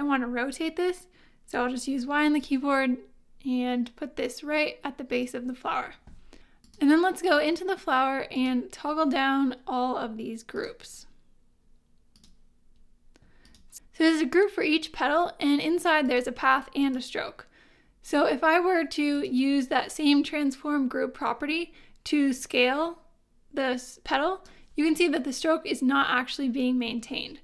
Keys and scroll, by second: 1.5 y.